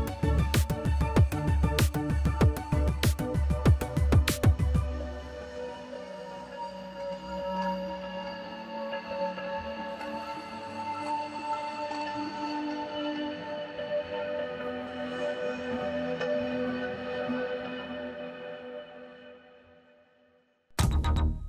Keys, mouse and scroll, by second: 0.8-2.5 drag, 3.4-5.1 drag, 5.7-7.0 drag, 7.6 click, 9.1-9.9 drag, 10.0-12.3 drag, 12.4-13.0 drag, 13.1 click, 14.6 Tab, 16.3-17.1 drag, 17.1 a, 17.4 a, 18.1 a, 18.6 click, 19.0 Tab, 19.6 click, 21.2 click, 21.2 a, 21.3 a.